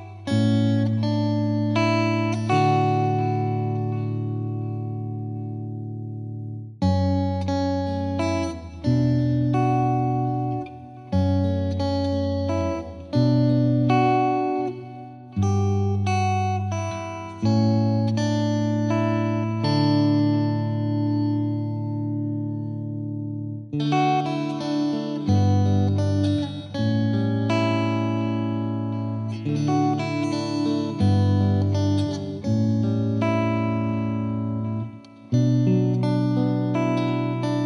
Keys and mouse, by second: 1.7-3.8 drag, 4.7 click, 7.3-8.6 drag, 9.3-10.3 drag, 10.8-12.0 drag, 13.0-14.1 drag, 14.5-15.6 drag, 17.3-18.4 drag, 19.1-20.4 drag, 20.8-21.9 drag, 23.5 click, 26.3-27.4 drag, 32.7-33.9 drag, 34.1 click.